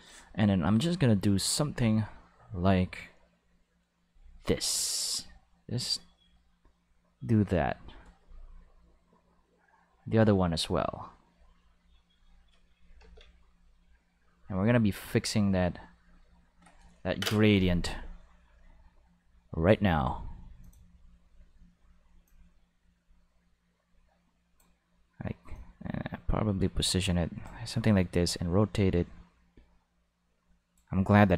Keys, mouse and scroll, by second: 2.3 click, 4.0-8.4 drag, 9.6-12.0 drag, 13.0 ctrl+z, 13.5-15.8 drag, 20.6 click, 22.2-24.5 drag, 25.5-27.4 drag, 28.2-31.3 drag.